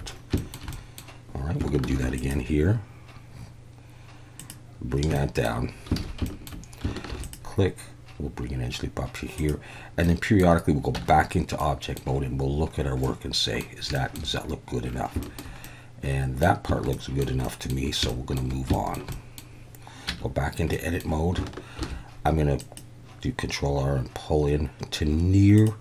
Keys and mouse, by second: 0.5 shift+middle click, 0.8 middle click, 1.9 ctrl+r, 4.4 click, 5.2 shift+click, 6.0 alt+a, 6.2 shift+middle click, 7.1 ctrl+r, 9.4 click, 10.2 middle click, 11.0 Tab, 11.6-12.0 middle drag, 13.0-13.6 middle drag, 14.0 shift+middle click, 15.2 shift+middle drag, 15.6-16.4 middle drag, 16.9-17.2 shift+middle drag, 17.4 middle drag, 18.1-18.4 shift+middle drag, 18.7 shift+middle drag, 19.1 middle drag, 20.1 Tab, 20.7 middle click, 21.8 ctrl+r, 25.5 click.